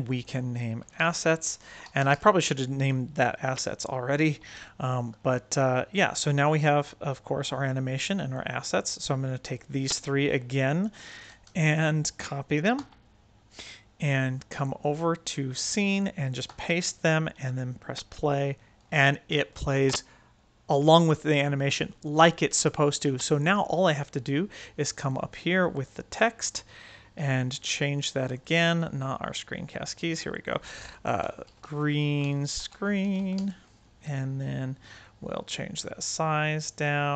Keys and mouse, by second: 0.0-2.9 drag, 1.2 s, 4.5-5.1 ctrl+middle drag, 6.5-8.3 drag, 8.7-9.4 drag, 11.3 shift+x, 12.7 ctrl+c, 14.7 click, 16.4 ctrl+v, 17.8 space, 19.7 space, 25.7 click, 28.1 click, 28.6 click, 30.0 click, 30.2 click, 31.8 e, 32.9 e, 34.9-37.1 drag.